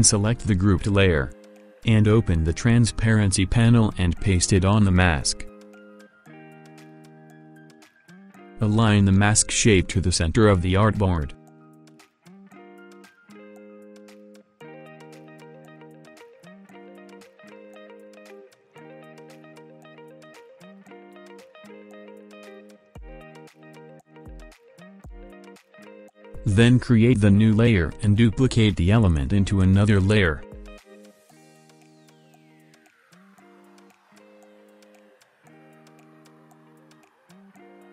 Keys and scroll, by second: 18.4 ctrl+z.